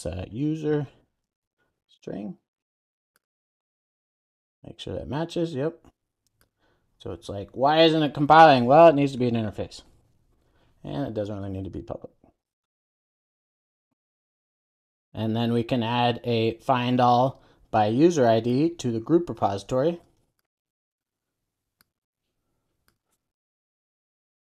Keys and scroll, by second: 3.6 super+s, 7.7 super+s, 9.7 Return, 11.6 super+s, 24.0 super+v.